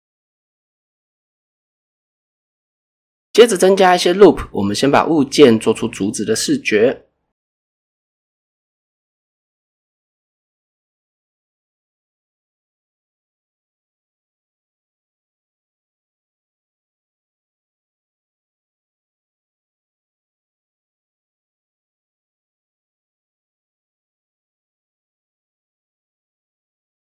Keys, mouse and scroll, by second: 1.2 ctrl+r, 1.6 click, 4.3 click, 4.8 shift+middle drag, 5.4 alt+click, 6.7-8.5 drag, 9.2 s, 10.5 right click, 13.1 s, 17.7 click, 18.5 ctrl+r, 19.4 click, 19.6 right click, 20.0 s, 21.4 click, 21.9 alt+click, 24.6 g, 24.8 g, 25.4 click, 25.6 s.